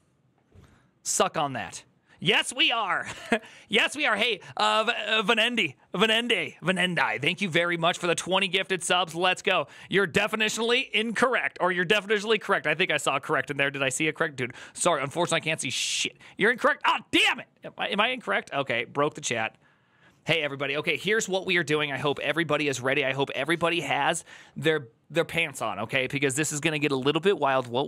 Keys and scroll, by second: 3.0 alt++.